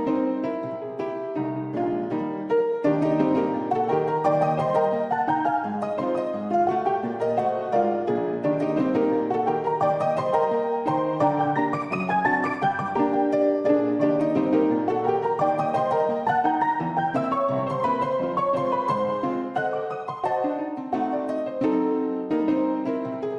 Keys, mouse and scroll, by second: 0.2-0.6 drag, 1.5 shift+d, 3.1 g, 5.3 shift+middle drag, 5.7-6.0 middle drag, 6.7 r, 11.9-12.5 middle drag, 13.4 `, 15.8 Tab, 16.7 s, 19.1 middle click, 20.3 Tab, 20.6 shift+middle click, 21.1 middle click, 22.8 middle click.